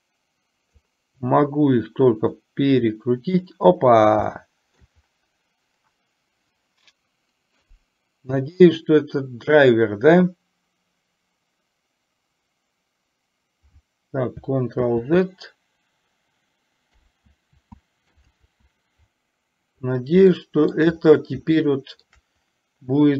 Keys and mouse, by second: 0.1 click, 2.6-3.6 drag, 4.4 shift+middle click, 14.9 ctrl+z, 20.4-20.8 shift+middle drag, 21.7-22.1 shift+middle drag.